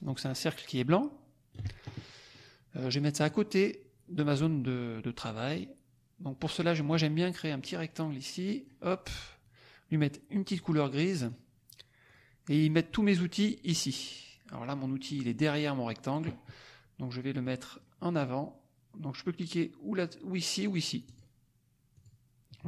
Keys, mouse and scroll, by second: 2.2 click, 3.1 click, 6.8 click, 7.5-8.9 drag, 9.8 click, 10.2 middle click, 11.3 click, 12.1 click, 12.4-13.8 drag, 17.4-18.0 drag, 21.0 click, 21.9 click.